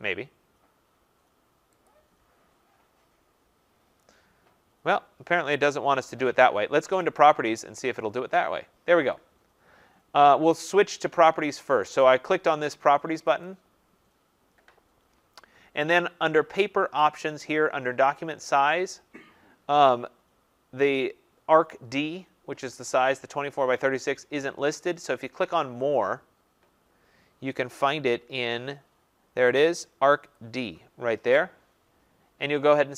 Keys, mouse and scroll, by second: 1.9 click, 5.7 click, 7.2 click, 12.0 click, 13.5 click, 18.4 click, 26.0 click, 27.9-28.9 scroll, 30.4 click.